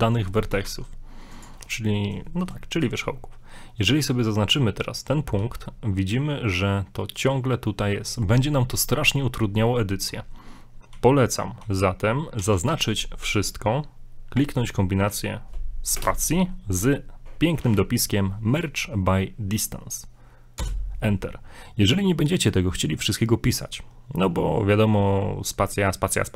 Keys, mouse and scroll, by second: 0.7 ctrl+Tab, 1.9 scroll up 2, 2.3 shift+middle click, 2.8 right click, 5.4 g, 8.5 scroll down 1, 10.2 scroll down 2, 10.9 scroll down 1, 11.0 z, 11.6 z, 12.4 a, 12.7 a, 16.0 space.